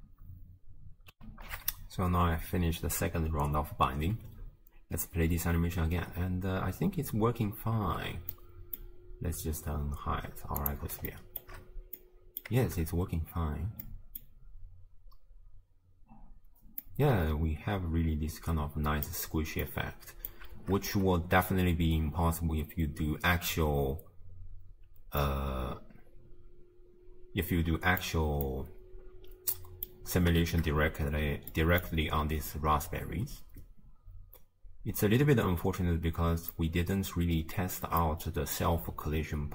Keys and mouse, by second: 1.4 ctrl+alt+shift+q, 4.2 space, 7.8 space, 8.5-8.8 drag, 10.6 click, 11.2 shift+drag, 12.1-12.5 drag, 12.7 shift+space, 14.0 click, 16.5 space, 17.0-19.1 drag, 19.6-20.4 drag, 20.6 shift+space, 24.9 space, 25.3-28.2 drag, 28.5-30.0 drag, 30.6 shift+space, 31.6 click, 32.5 space, 36.4 space, 36.7-38.2 drag, 38.7-39.5 drag.